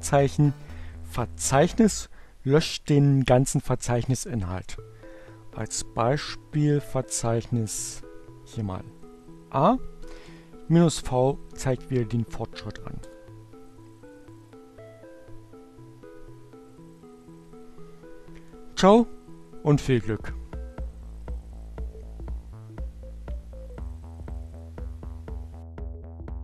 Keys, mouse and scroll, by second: 7.3 a, 9.8-10.7 typing, 12.5 Return.